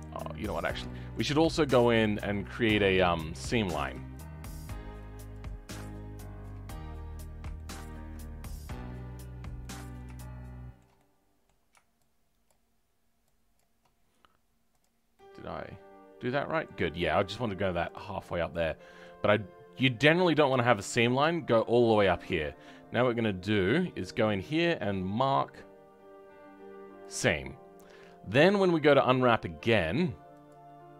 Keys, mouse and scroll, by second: 0.2-0.8 scroll up 2, 0.8-2.9 shift+middle drag, 2.9 click, 3.3-4.6 middle drag, 4.6 shift+click, 5.3 shift+click, 6.6-12.4 middle drag, 12.4 shift+click, 13.5 shift+click, 14.7 click, 15.1-17.8 middle drag, 17.8 click, 18.2 scroll down 3, 18.5 middle click, 19.2-19.7 scroll up 1, 19.7-23.6 middle drag, 23.6-27.2 drag, 27.2-30.9 right drag.